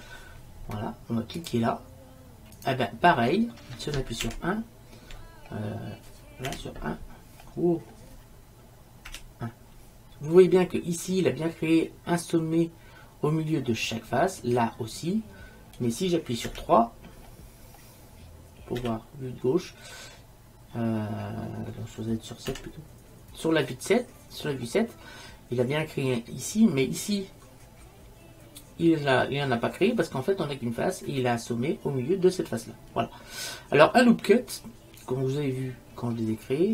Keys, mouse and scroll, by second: 4.4 KP_1, 6.6 KP_1, 16.6 KP_3, 18.9 KP_3, 22.6 KP_7, 33.5-35.1 middle drag, 35.2-36.7 middle drag.